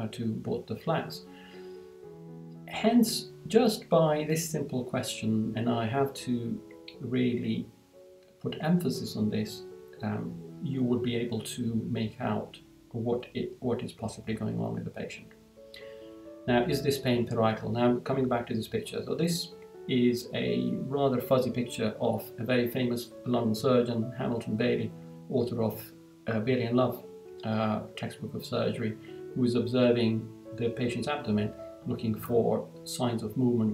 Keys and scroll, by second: 14.8 Down.